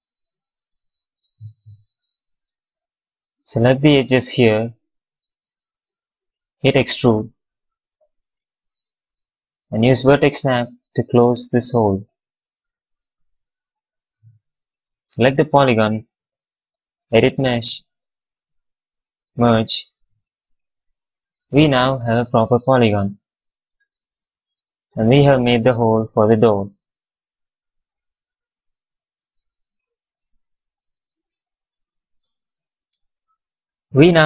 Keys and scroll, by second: 7.4 w, 10.6 v, 12.6 q, 19.8 q.